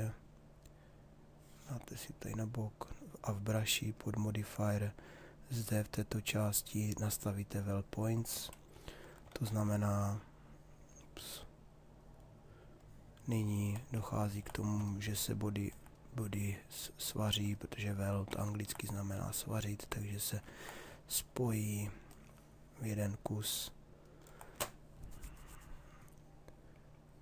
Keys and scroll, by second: 8.9 ctrl+z.